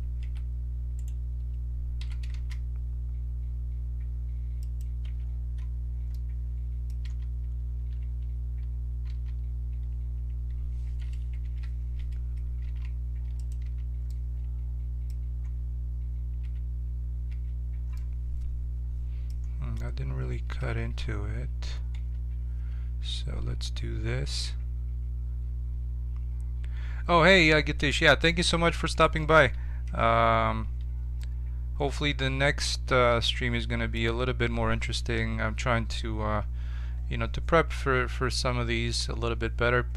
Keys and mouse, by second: 0.2 e, 2.0 s, 5.0 Tab, 7.0 z, 8.0 Tab, 9.0 z, 11.4 ctrl+l, 12.6 g, 13.6 z, 16.4 Tab, 17.2 Tab, 20.5 a, 20.8 a, 21.9 Tab, 28.7-29.8 right drag, 29.8 ctrl+KP_Subtract, 35.1 KP_7.